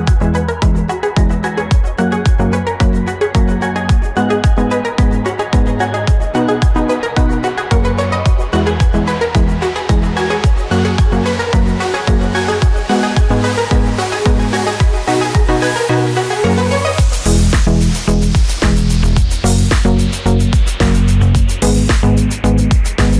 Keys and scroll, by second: 0.9 space, 4.9 ctrl+-, 11.0 space, 12.7 ctrl+-, 19.1 ctrl+alt+z.